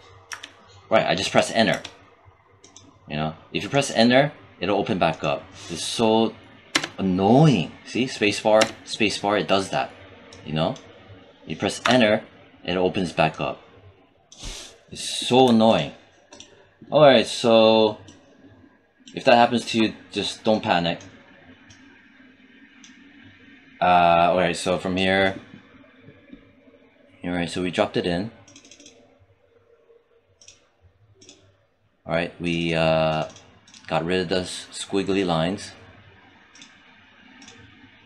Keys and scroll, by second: 0.1 Return, 1.5 Return, 6.6 space, 11.7 Return.